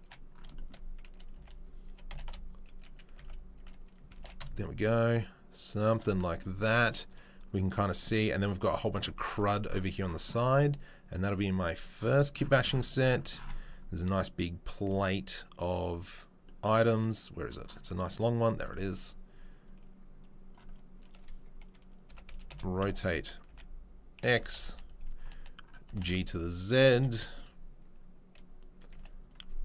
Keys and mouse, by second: 1.3 s, 4.1 g, 18.4 click, 18.5-19.7 middle drag, 19.7-21.1 drag, 21.1-29.6 middle drag, 22.0 r, 25.8 g.